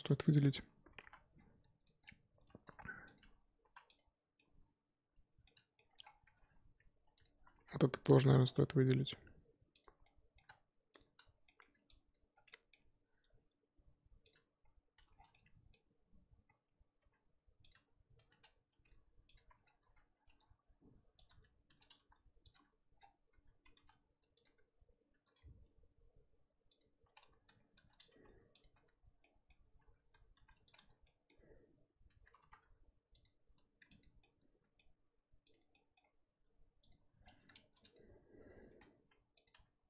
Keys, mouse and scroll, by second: 0.0 click, 1.0 l, 2.4 g, 3.2 Tab, 3.7 z, 3.9 click, 4.4-6.0 middle drag, 6.0-7.0 scroll up 2, 6.2 Tab, 7.0 Tab, 7.1 click, 7.3 Tab, 8.1 click, 8.2-9.8 middle drag, 9.8 alt+click, 10.0-11.0 middle drag, 11.0 shift+click, 13.2 g, 14.3 Tab, 14.9 Tab, 15.1-17.0 scroll down 4, 17.0 g, 17.7 Tab, 18.2 Tab, 18.7 g, 19.3 Tab, 19.9-20.2 scroll up 4, 20.2 g, 21.3 Tab, 21.7 Tab, 22.0 g, 22.5 Tab, 22.9-23.3 scroll down 1, 23.3 Tab, 23.8 g, 24.4 Tab, 25.1 Tab, 26.0 g, 27.5 Tab, 27.7 Tab, 28.1 g, 28.7 Tab, 29.2-29.7 middle drag, 29.7 scroll up 1, 29.8 Tab, 30.4 g, 30.7 Tab, 31.1 middle drag, 31.3-32.1 scroll up 2, 32.1 Tab, 33.2 alt+click, 34.0 alt+click, 34.2-35.5 middle drag, 35.5 click, 35.7 middle drag, 36.0-36.9 scroll up 2, 36.9 ctrl+click, 37.2-37.7 scroll down 2, 37.9 click, 38.7 g, 39.5 Tab.